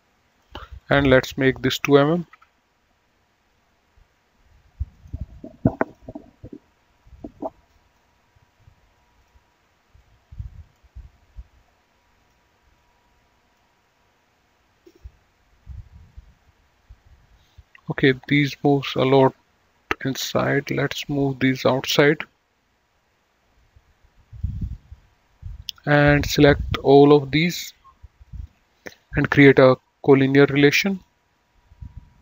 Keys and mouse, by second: 0.4 click, 2.5 KP_2, 2.7 Return, 2.7 KP_Enter, 5.2 right click, 6.1 click, 7.4 click, 9.4 click, 12.4 click, 18.5 click, 20.6 click, 23.8 click, 26.9 ctrl+click, 28.5 ctrl+click, 30.3 click.